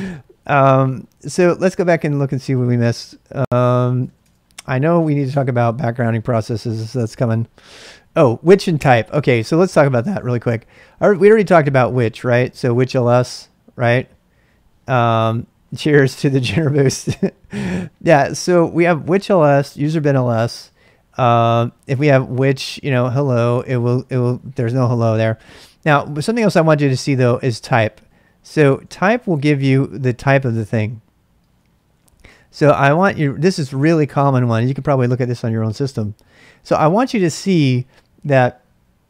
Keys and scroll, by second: 2.0 ctrl+a, 2.2 ctrl+a, 3.1 ctrl+a, 3.2-4.5 typing, 5.2 Return, 5.8-8.0 typing, 9.6 ctrl+[, 9.7-13.1 typing, 21.5-23.9 typing, 26.7-30.2 typing, 31.6-33.2 typing.